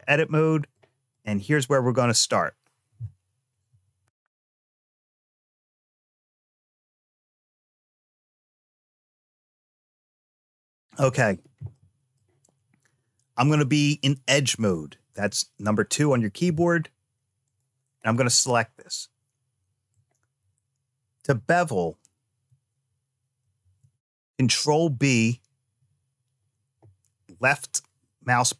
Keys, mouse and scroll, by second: 1.0 click, 11.6 middle click, 13.3 click, 15.1 2, 17.3 click, 18.0-19.8 middle drag, 23.3 ctrl+b.